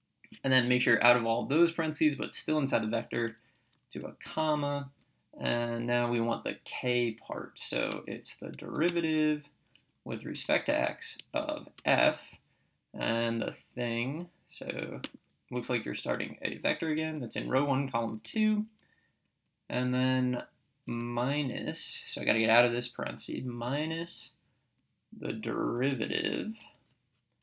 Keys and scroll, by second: 4.3 ,, 8.9 Return, 10.4 x, 11.2 Right, 11.8 f, 15.1 (, 17.0 1, 17.6 ,, 18.3 2, 19.3 Right, 23.7 -.